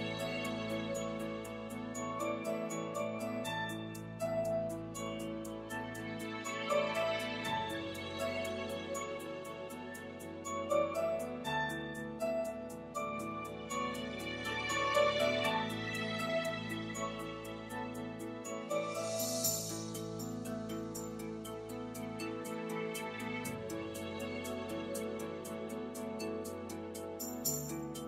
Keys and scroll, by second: 1.6 r, 3.3 3, 13.4 3, 15.9 l, 17.1 2, 18.9 3.